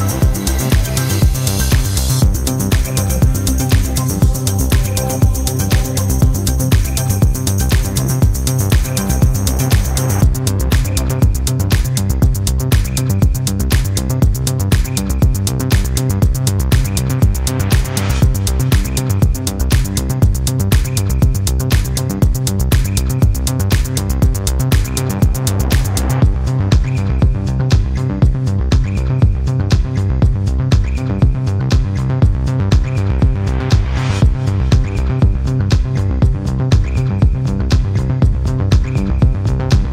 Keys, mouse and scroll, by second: 0.7 click, 1.9 0, 2.6 click, 3.3 1, 3.8 0, 5.5 click, 6.7 scroll down 1, 7.2 click, 7.9 click, 10.1 click, 12.5 right click, 14.6 click, 15.1 click, 15.7-18.2 drag, 18.6-18.9 scroll up 2, 19.3 click, 21.1 click, 21.9 space, 23.0-23.4 scroll down 2, 24.9-25.3 scroll down 2, 25.9 scroll down 2, 26.5-26.9 scroll up 2, 26.9-27.7 scroll down 3, 28.5 click, 30.5 click, 32.5 click, 34.5 click.